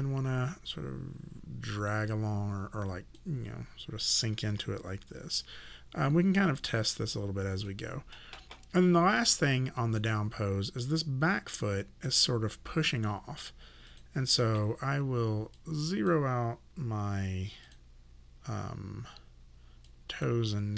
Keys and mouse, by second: 4.5 w, 5.5 click, 9.3 click, 12.1 click, 19.9 click.